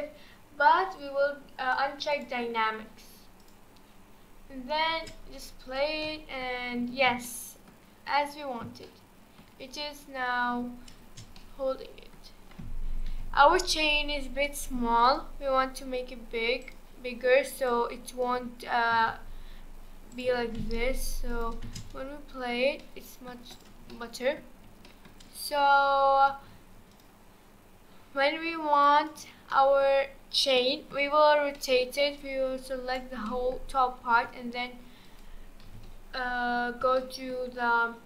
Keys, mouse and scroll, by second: 2.1 click, 3.4 click, 4.1-4.9 scroll down 4, 4.9 space, 6.1-6.6 middle drag, 6.6-7.2 scroll up 4, 7.2-8.0 shift+middle drag, 8.0-8.9 scroll up 2, 8.9-10.2 shift+middle drag, 10.2-11.0 scroll down 4, 11.0 space, 11.4-13.1 middle drag, 13.1 KP_1, 15.0 click, 16.6-17.7 drag, 18.9 s, 20.3 g, 21.6 space, 22.8-23.5 middle drag, 23.5 click, 23.9-26.5 middle drag, 26.5 space, 26.9-28.9 drag, 29.1-29.5 drag, 29.5-30.0 middle drag, 30.0-30.6 scroll down 4, 30.6-32.2 shift+middle drag, 32.2 click, 33.3-34.1 middle drag, 34.1 r, 35.6 KP_1, 36.0-37.0 scroll up 2, 37.0-38.0 shift+middle drag.